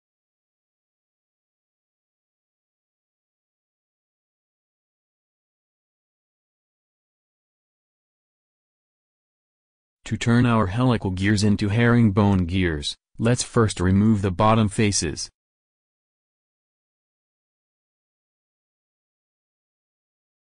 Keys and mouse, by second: 0.0 a, 0.2 a, 1.2 w, 2.3 Tab, 10.8-12.1 drag, 12.5-13.7 middle drag, 18.9 KP_1, 20.2 Tab.